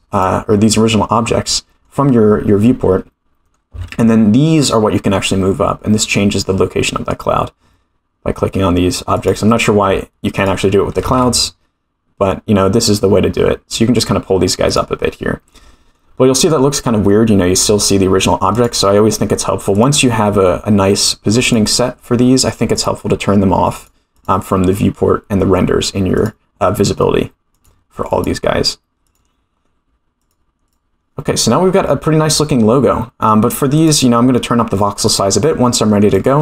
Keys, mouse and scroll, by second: 1.5-1.9 middle drag, 4.0 g, 10.4 click, 11.0 g, 15.5 middle click, 17.1 scroll down 1, 18.5 click, 19.7 click, 21.4 click, 22.7 click, 23.0-23.7 scroll down 1, 23.7 click, 23.7 scroll down 1, 24.1 click, 25.4 scroll down 1, 26.1 click, 27.5 click, 28.1 click, 29.0 click, 30.2 click, 30.6 click, 33.7 click, 35.1 click, 36.1-36.4 drag.